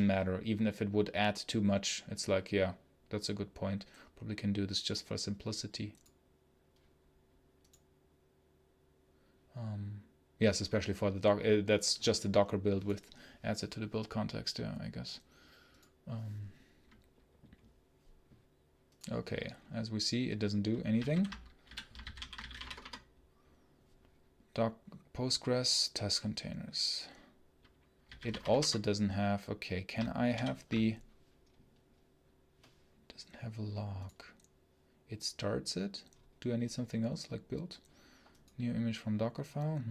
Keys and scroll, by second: 30.2 ctrl+super+l.